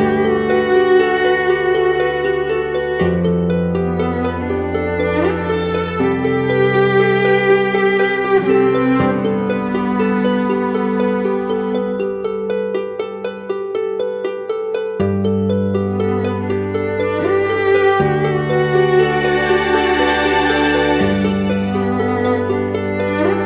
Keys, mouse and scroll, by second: 5.2 double click, 15.3 ctrl+t, 16.4 ctrl+click, 19.5 ctrl+click, 22.3 ctrl+click.